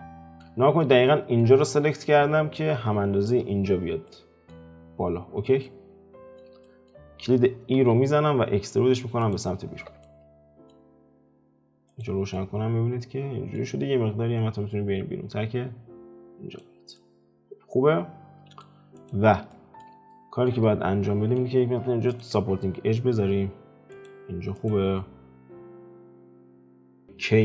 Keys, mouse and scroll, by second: 7.1-7.4 scroll down 2, 7.8 e, 9.7 alt+q, 10.0 middle click, 10.8-11.9 scroll down 3, 11.9 click, 12.3-14.4 middle drag, 14.4 click, 16.9-18.9 middle drag, 18.9 click, 19.5-20.7 shift+middle drag, 20.7-21.6 scroll up 2, 21.6 ctrl+r, 24.5 click, 24.9 middle click, 25.9-26.2 scroll up 2, 26.2 ctrl+middle click, 26.8 k.